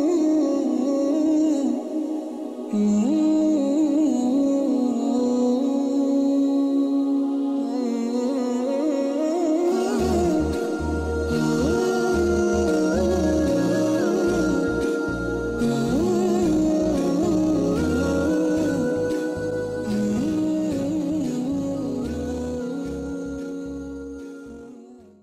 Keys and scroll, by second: 0.4 ctrl+z, 11.0 space.